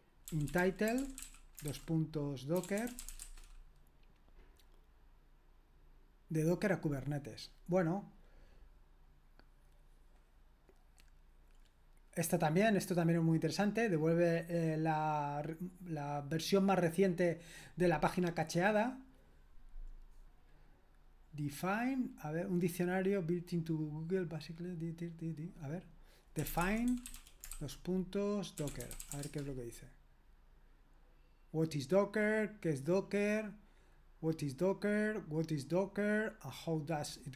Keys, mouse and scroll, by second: 0.0-3.6 typing, 26.1-29.6 typing, 26.4 click.